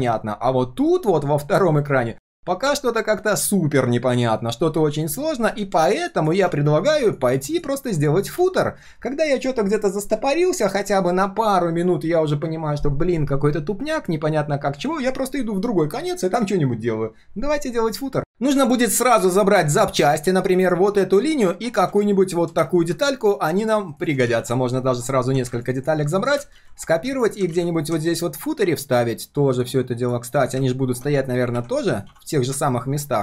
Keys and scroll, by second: 24.2 ctrl+c, 26.5 ctrl+c, 27.5 ctrl+v.